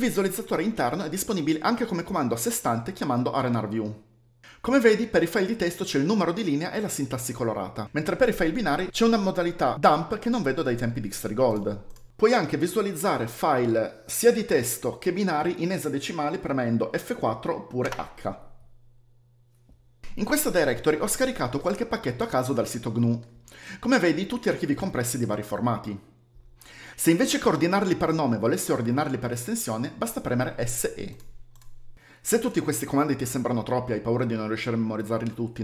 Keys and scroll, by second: 7.9-9.9 typing, 12.1 v, 17.7 h, 19.0-20.0 typing, 30.5 s, 35.3 ctrl+shift+t.